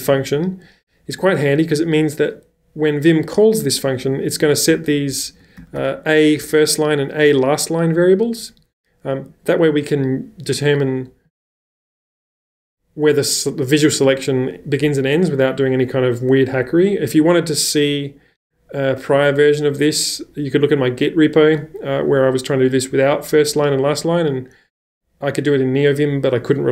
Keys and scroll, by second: 4.7-7.2 typing.